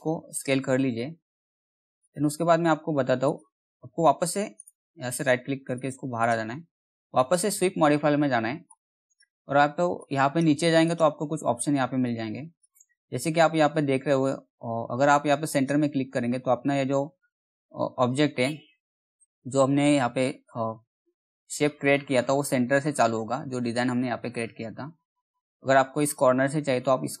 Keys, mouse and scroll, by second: 4.1 right click, 5.3-14.5 drag, 15.0 click, 25.5 click.